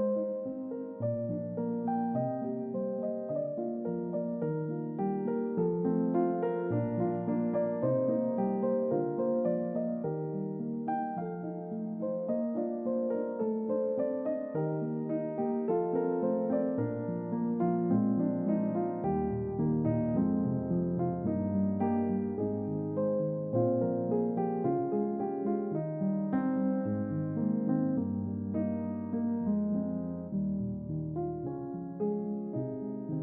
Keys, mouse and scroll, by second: 1.4 click, 7.5 click, 9.4 typing, 10.4 click, 10.8-11.2 scroll down 2, 11.3-12.6 middle drag, 14.2 shift+middle click, 18.8 5, 22.1 typing, 22.8 click, 27.8 click, 27.9-28.7 typing, 29.2 click, 32.6 click.